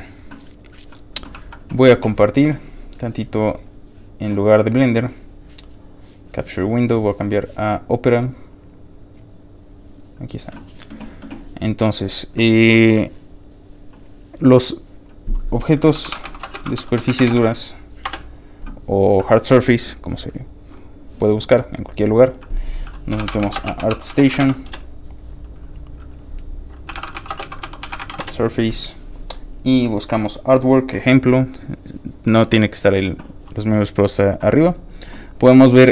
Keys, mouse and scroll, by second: 1.4 alt+Tab, 2.3 alt+click, 2.9 click, 6.1 click, 6.7 click, 9.8 click, 11.6 click, 14.9 click, 15.7-17.8 typing, 18.0 Return, 19.0 click, 20.9 ctrl+click, 22.2 ctrl+click, 22.9-24.8 typing, 26.1 click, 26.7-28.6 typing, 31.8 click, 33.2-34.5 scroll down 6.